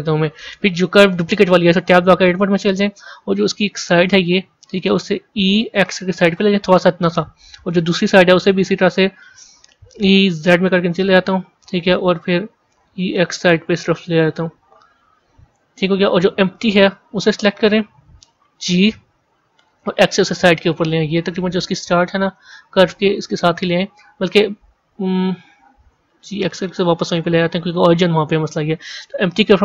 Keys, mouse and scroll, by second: 1.9 Tab, 2.4-3.5 scroll up 4, 4.0 click, 8.4 click, 11.8-12.6 scroll down 1, 15.8 Tab, 16.9 click, 18.2 g, 22.2-25.8 middle drag, 25.8 g.